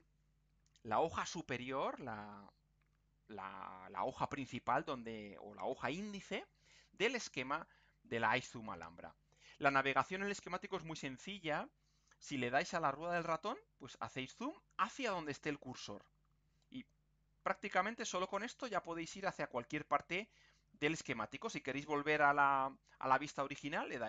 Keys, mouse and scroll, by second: 12.7-13.6 scroll up 2, 13.8-14.1 scroll down 2, 15.1-15.7 scroll up 3, 15.9-16.4 scroll down 1, 17.0-17.6 scroll up 2, 17.8-18.3 scroll down 1, 18.8-19.4 scroll up 1, 19.4-19.9 scroll down 1, 20.4-20.9 scroll up 1, 21.0-21.4 scroll down 1, 21.6-22.0 scroll up 1.